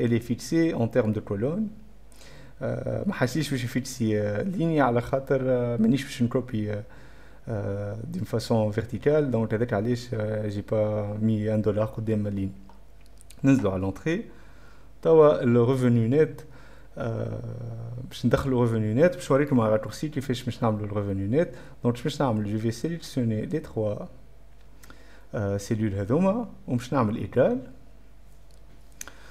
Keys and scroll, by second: 14.7 Return, 14.9 Return, 15.0-15.8 typing, 26.5-29.1 typing.